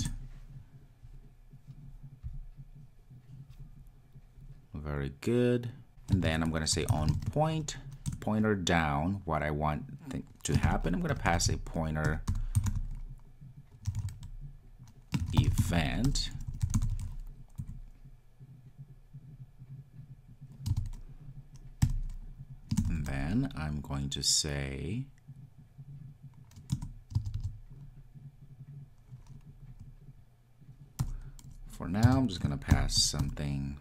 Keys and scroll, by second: 0.2 Return, 8.4 Return.